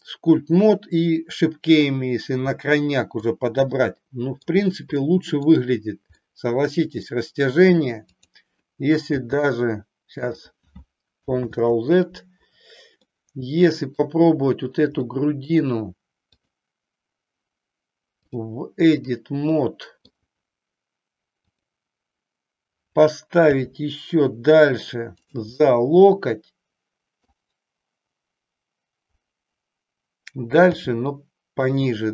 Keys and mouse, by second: 3.2-4.5 middle drag, 5.1 middle click, 6.2-7.2 middle drag, 8.1 click, 9.0 g, 10.4 click, 11.4 ctrl+z, 13.1-14.2 middle drag, 15.1 middle click, 18.1 click, 19.6 middle click, 21.4 click, 23.5 g, 25.6-27.2 middle drag, 30.7 g.